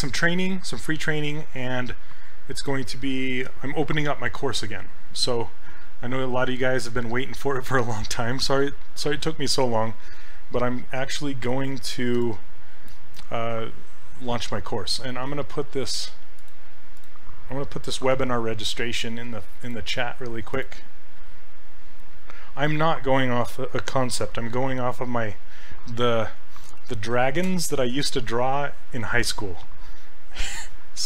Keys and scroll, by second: 12.2 s, 18.0 ctrl+c, 26.8 ctrl+v, 27.5 Return.